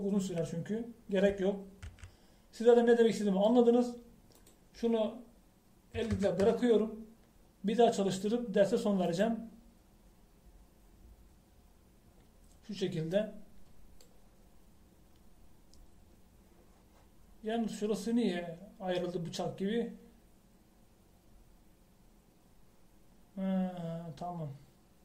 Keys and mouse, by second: 3.0 z, 4.3-5.5 middle drag, 10.2-12.0 drag, 14.4 middle click.